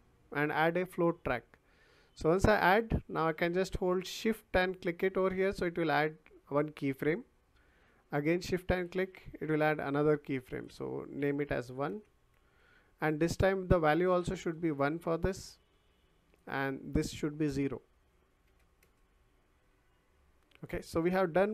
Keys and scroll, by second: 11.9 1, 12.4 Return, 14.0 1, 14.3 Return, 18.4 0, 18.8 Return.